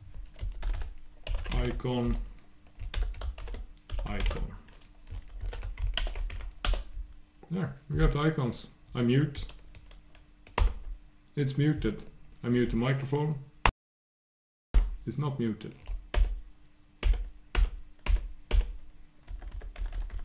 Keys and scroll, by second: 6.1 shift+super+Return, 10.6 super+., 16.1 super+., 19.8 super+'.